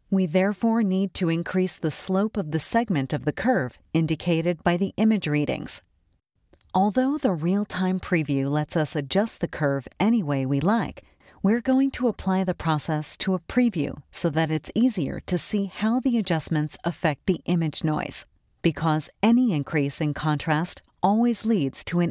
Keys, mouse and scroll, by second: 2.7 click, 4.8-6.7 drag, 8.5-9.7 drag, 12.1 click, 13.3 click, 15.5-18.2 drag, 21.6 click.